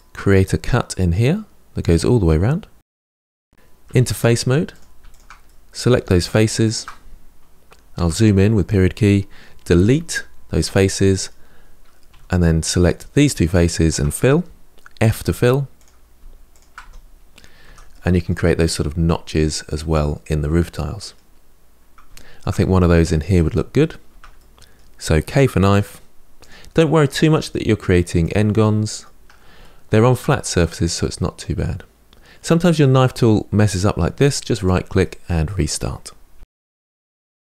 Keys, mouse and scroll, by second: 0.4-1.9 middle drag, 2.9-3.6 scroll up 2, 3.6 3, 4.5 click, 4.8 shift+click, 5.2-6.4 middle drag, 6.4 shift+click, 7.7 KP_Decimal, 9.6 Delete, 10.8-11.9 middle drag, 11.9 2, 12.6 click, 13.4 shift+click, 14.8 f, 15.6 click, 16.3 shift+click, 16.6 f, 17.0-17.4 scroll down 5, 17.4 Tab, 17.7 middle click, 18.3-19.1 scroll down 6, 19.1-21.2 middle drag, 21.2-21.9 scroll up 3, 21.9-23.4 shift+middle drag, 23.4-23.9 scroll up 1, 23.9 Tab, 24.2-25.5 middle drag, 25.5 k, 28.4-33.0 middle drag, 34.8-36.1 middle drag, 36.1 k.